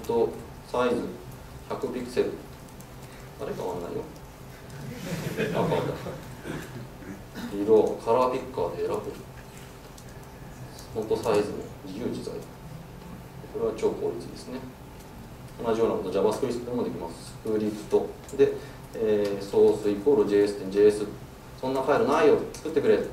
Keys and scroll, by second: 1.0 Tab, 18.0 Tab, 22.5 alt+Return.